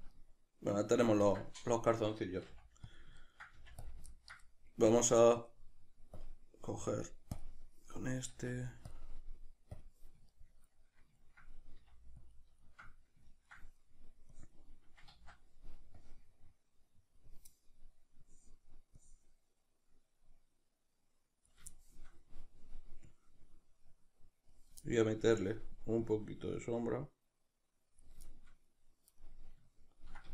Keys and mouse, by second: 2.5 f, 3.0 click, 3.2 ctrl+middle click, 3.6 f, 3.8 click, 4.1-7.4 ctrl+middle drag, 7.4-9.0 drag, 8.3 f, 9.0-12.3 middle drag, 11.8 f, 12.3 click, 12.6-14.4 shift+middle drag, 14.4-21.7 drag, 15.2 ctrl+z, 21.7-23.1 shift+middle drag, 23.1-24.8 drag, 24.8-26.0 shift+middle drag, 26.0-28.3 drag, 28.3-30.3 shift+middle drag.